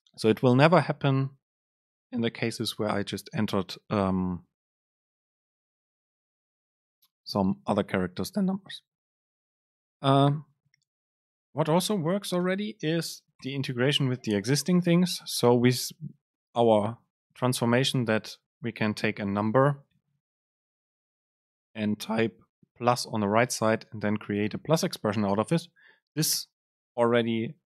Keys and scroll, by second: 11.6 Return, 17.5 BackSpace, 20.5 Return.